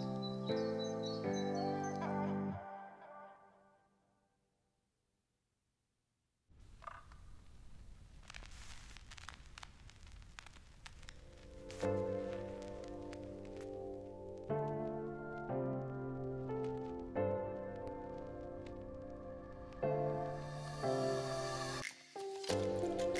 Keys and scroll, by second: 15.8 v, 20.6 ctrl+c, 20.8 ctrl+f.